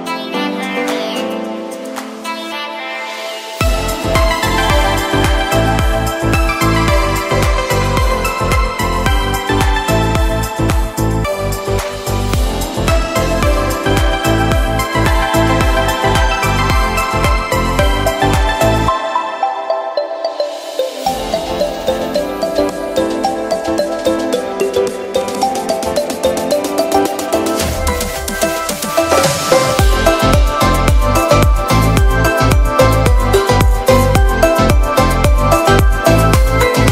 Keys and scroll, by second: 2.7 super+t, 3.5 alt+shift+super+t, 6.4 super+j, 12.3 super+j, 16.0 super+t, 17.9 alt+shift+Return, 18.1 Delete, 18.9 shift+super+Delete, 19.1 shift+super+n, 19.4 shift+super+Return, 20.0 b, 26.1 v, 30.1 b.